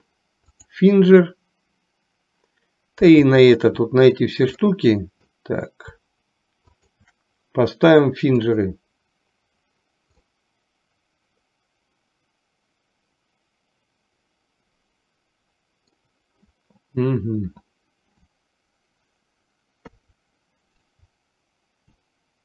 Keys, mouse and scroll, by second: 3.6 shift+click, 4.7-5.5 middle drag, 6.7 shift+click, 8.5 click, 10.4 scroll up 1, 10.6-16.1 middle drag, 19.9 KP_3.